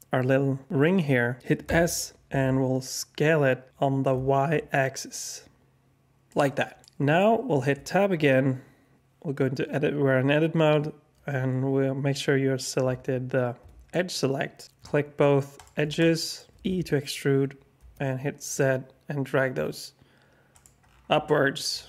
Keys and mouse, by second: 1.6 s, 7.7 Tab, 13.6 2, 15.5 shift+click, 15.9 alt+click, 16.6 e, 21.2 alt+click.